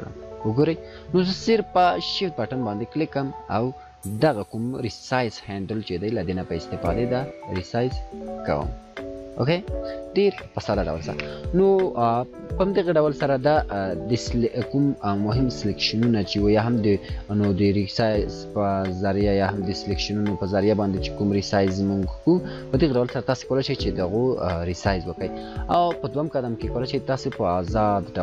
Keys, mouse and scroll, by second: 5.1-9.2 shift+drag, 11.0 scroll down 1, 20.6-20.9 scroll down 1.